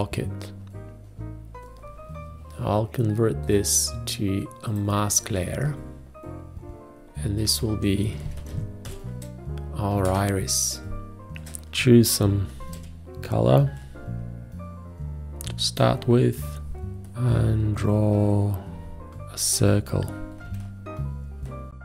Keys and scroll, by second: 9.3 typing, 10.6 Return, 11.3 space, 13.0 d, 16.3 space, 17.1 o, 20.9 v.